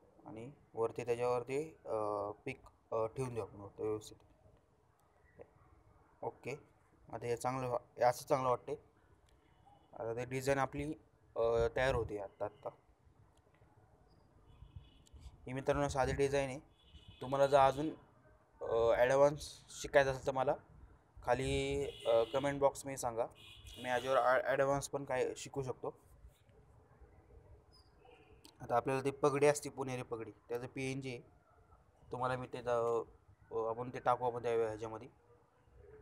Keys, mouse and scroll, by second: 6.5 shift+Up, 8.6 ctrl+shift+t, 9.8-10.8 shift+drag, 13.5 ctrl+shift+t, 14.6-15.1 alt+shift+scroll up 2, 15.4-17.9 drag, 19.6-20.1 alt+shift+scroll down 2, 23.1 shift+click, 27.9-29.2 shift+scroll down 2, 29.2-29.7 shift+scroll down 1.